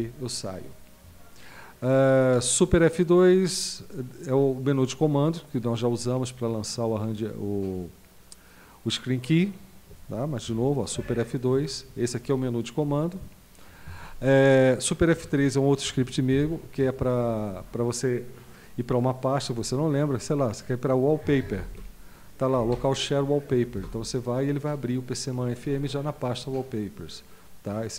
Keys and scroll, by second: 11.0 super+F2, 12.8 Escape, 16.3 super+F3, 21.0-22.2 typing, 22.6 Down, 23.8 Return.